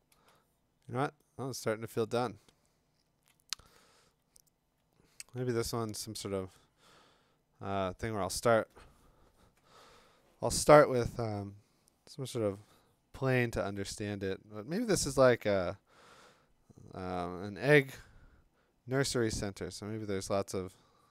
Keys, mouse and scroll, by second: 1.0 click, 1.9 click, 2.0 click, 2.0 click, 2.1 click, 2.6 click, 2.7 click, 2.7 click, 3.1 click, 3.3 click, 3.3 click.